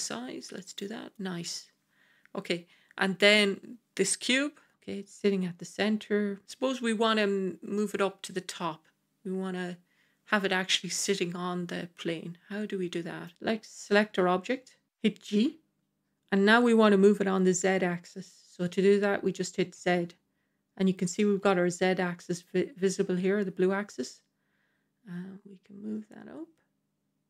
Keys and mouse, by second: 1.0 click, 3.1 click, 7.6-13.2 middle drag, 13.3-13.6 middle drag, 15.2 g.